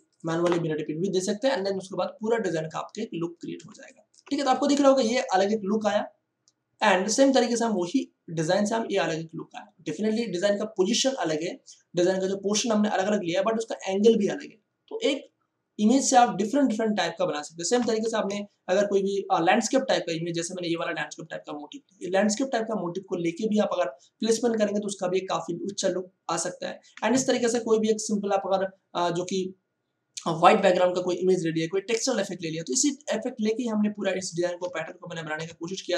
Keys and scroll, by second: 0.3 F1, 3.6 space, 18.0 ctrl+o, 28.1 o, 34.6 ctrl+shift+Tab.